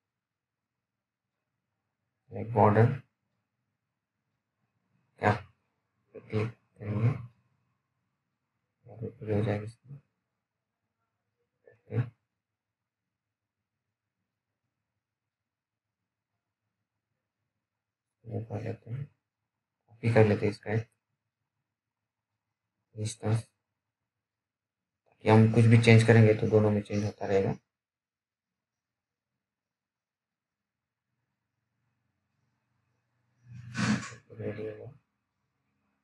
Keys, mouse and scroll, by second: 1.4 click, 4.6 scroll down 1, 7.0 click, 7.6 scroll down 1, 8.1 alt+middle click, 8.7-9.3 scroll up 1, 9.3 click, 10.9 scroll down 1, 11.4 alt+middle click, 11.9 scroll down 1, 12.3 alt+middle click, 13.4-13.9 typing, 14.8 right click, 15.6 click, 16.5-16.9 scroll down 1, 16.9 middle click, 17.1-17.6 scroll up 1, 17.6 middle click, 18.7 click, 18.7 click, 23.3 click, 24.9 alt+middle click, 26.9-28.3 scroll up 1, 28.3-28.7 scroll down 1, 29.1 alt+middle click, 31.7 click, 31.7 click, 33.2 alt+middle click, 33.7-34.0 scroll up 1, 34.0 click.